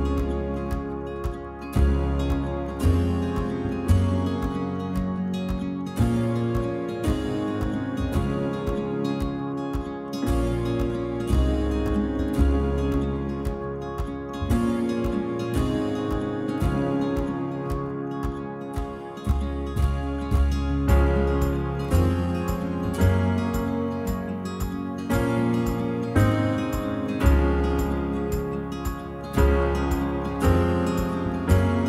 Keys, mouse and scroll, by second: 0.1 ctrl+r, 0.8 click, 1.0 shift+middle click, 1.1 scroll up 1, 1.7 alt+click, 2.0-2.6 scroll up 1, 2.6 alt+shift+click, 2.8-3.4 middle drag, 3.4 alt+shift+click, 3.9 ctrl+z, 4.2 alt+shift+click, 4.5 alt+shift+click, 4.9-5.4 scroll down 2, 5.4 right click, 5.6 click, 5.8-6.3 middle drag, 6.3 scroll up 1, 6.6-7.1 shift+middle drag, 7.1-8.1 scroll up 2, 7.3 middle click, 8.1 l, 9.3 h, 9.8 alt+click, 10.5 alt+shift+click, 10.7 alt+shift+click, 11.3 right click, 11.4 scroll down 5, 11.6 click, 11.8-12.2 middle drag, 12.2-12.7 scroll up 2, 12.7 alt+click, 12.9-13.3 middle drag, 13.3 shift+click, 13.5-14.1 middle drag, 14.1 shift+click, 14.4 right drag, 14.6 click, 14.7-15.0 scroll down 2, 14.9 middle click, 15.0 shift+middle click, 15.5 alt+h, 15.7 click, 15.9-16.2 scroll down 1, 16.2 middle drag, 16.4 scroll up 1, 16.7 middle click, 17.1 alt+click, 17.9 middle click, 18.7-19.1 scroll up 1, 19.1 shift+click, 19.2 shift+middle click, 20.1-20.7 scroll up 2, 20.5 shift+click, 20.7-21.2 scroll down 5, 20.8 shift+middle click, 21.2-22.3 shift+middle drag, 22.3 right drag, 22.5 click, 22.7 shift+middle click, 23.0-24.6 scroll up 4, 23.3 shift+middle click, 24.6-25.1 middle drag, 25.1 alt+click, 25.3-26.6 scroll up 2, 26.6-27.0 middle drag, 27.0 alt+click, 27.1-27.6 scroll up 1, 27.6 alt+shift+click, 27.8 alt+shift+click, 28.0 alt+shift+click, 28.2-29.0 shift+middle drag, 29.0 alt+shift+click, 29.1-30.4 middle drag, 30.4 alt+shift+click, 30.6 alt+shift+click, 31.2-31.8 middle drag.